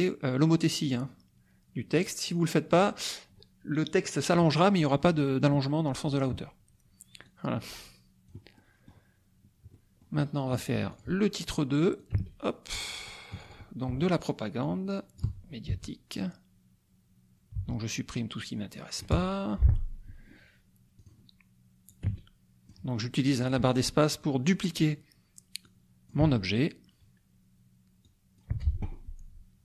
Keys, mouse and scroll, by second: 0.8-2.9 drag, 7.3-8.4 drag, 8.6 middle click, 9.7 middle click, 10.9 click, 12.0-13.2 drag, 12.1 space, 13.3 click, 14.6 click, 15.2 BackSpace, 16.2 Delete, 17.6 Delete, 18.3 click, 19.1 BackSpace, 20.9 click, 21.9 click, 22.1 space, 23.4 click, 25.7 click, 26.2 BackSpace, 28.0 click, 28.5 BackSpace.